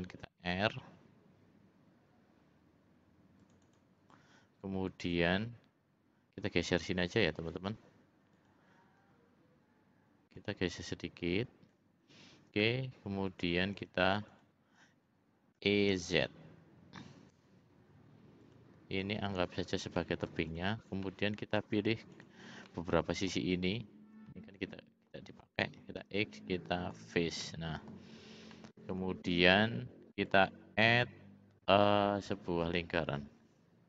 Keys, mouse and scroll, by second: 6.8 l, 8.3 click, 9.0 l, 10.3-11.7 drag, 13.3 click, 13.7 click, 14.3 click, 15.6 e, 18.9 click, 19.9 middle click, 20.5 click, 21.0 middle click, 22.1 shift+click, 22.6 middle click, 23.6 shift+click, 24.2 middle click, 26.0 x, 27.4 middle click, 28.5 middle click, 30.3-33.8 drag.